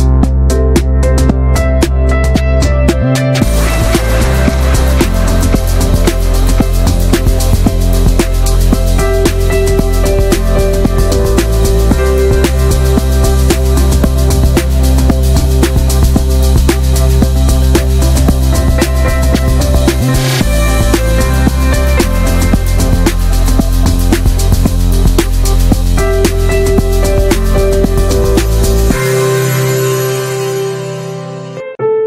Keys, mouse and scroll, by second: 0.2 alt+z, 0.4 middle click, 0.7 click, 1.1 alt+z, 1.2 shift+middle click, 1.5 scroll up 1, 1.7 shift+middle click, 3.1-3.9 shift+middle drag, 3.9 click, 4.3 shift+middle click, 4.9 scroll down 2, 5.1-5.5 middle drag, 5.5 ctrl+z, 5.8-6.3 shift+middle drag, 6.3 i, 8.2 middle click, 8.3 scroll up 1, 8.6 middle click, 9.1 e, 10.7 middle drag, 10.9-11.4 scroll up 4, 11.1 shift+middle click, 11.4 middle click, 12.1 ctrl+b, 13.9 click, 14.0-14.6 scroll down 3, 14.2 middle drag, 14.6 middle click, 14.7 scroll up 1, 14.9 ctrl+s, 15.1-15.4 middle drag, 15.4 ctrl+s, 16.6-17.1 middle drag, 17.3-17.9 alt+shift+middle drag, 17.9 scroll up 1, 18.0-18.4 shift+middle drag, 18.4 scroll up 1, 18.6 Tab, 19.0-19.3 drag, 19.3 alt+middle click, 19.6 alt+scroll down 1, 20.0 alt+z, 20.2 middle click, 20.4 alt+z, 20.6-21.3 shift+middle drag, 21.3 s, 23.1 middle click, 23.2 scroll up 1, 23.4-23.9 shift+middle drag, 23.9 ctrl+b, 25.5 middle click, 25.7 click, 25.9-26.3 middle drag, 27.6 alt+z, 27.8 shift+middle click, 28.1 e, 28.8 middle click, 29.1 scroll up 1, 29.4 middle click, 30.1 x, 31.0 drag, 31.3 middle drag, 31.4 Tab, 31.5 drag, 31.7 shift+middle click, 31.8 scroll up 3, 31.9-32.0 middle drag.